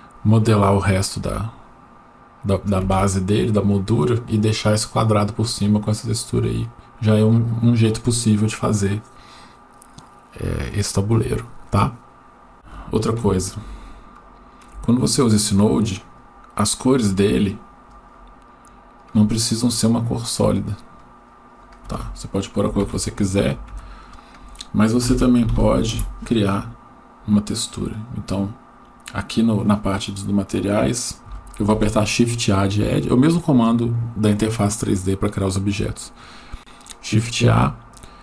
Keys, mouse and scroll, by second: 12.7 shift+scroll up 1, 13.7 shift+middle click, 15.2 click, 15.5 click, 16.7 click, 19.0 click, 23.7 shift+a, 31.7 shift+a.